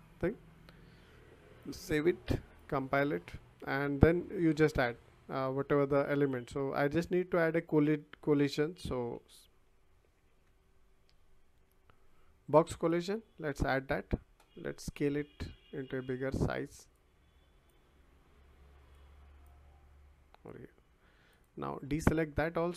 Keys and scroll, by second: 9.1 c, 10.2 o.